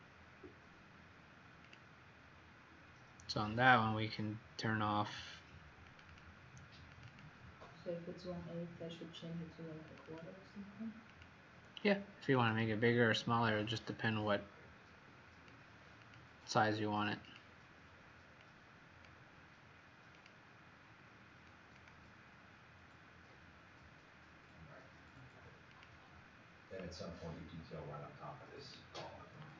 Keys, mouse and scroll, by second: 10.0 click, 11.0 click, 16.2 click.